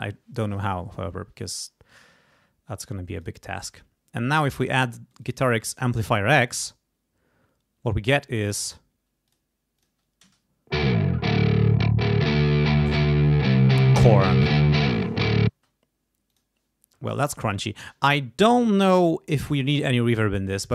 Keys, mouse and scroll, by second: 3.2 click, 3.6 click, 4.6 click, 5.1 click, 5.6 click, 6.5 click, 9.3 click, 9.8 click, 10.3 space, 15.5 space, 16.3 click, 19.4 right click.